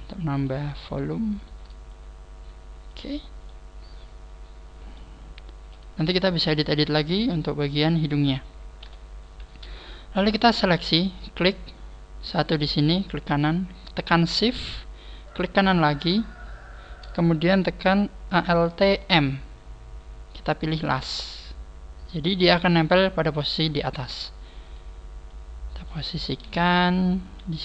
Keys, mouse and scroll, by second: 0.9 right click, 1.5 shift+right click, 1.9 click, 3.1 scroll down 3, 3.5 middle click, 5.6 KP_1, 6.2-6.9 scroll up 2, 6.9 middle click, 6.9 scroll up 1, 8.8 KP_1, 9.9 shift+middle click, 10.9 right click, 15.3 shift+right click, 24.7 right click, 25.3 click, 26.4 scroll up 3.